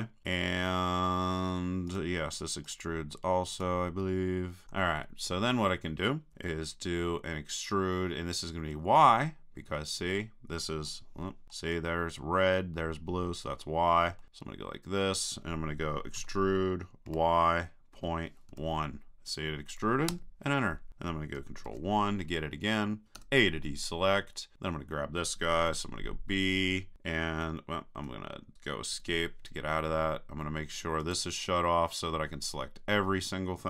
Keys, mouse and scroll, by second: 0.0 right click, 1.9-5.4 right drag, 9.8-12.1 middle drag, 14.2-15.5 middle drag, 16.2 e, 21.7 ctrl+KP_1, 23.2 a, 25.7 b, 31.0-33.0 drag.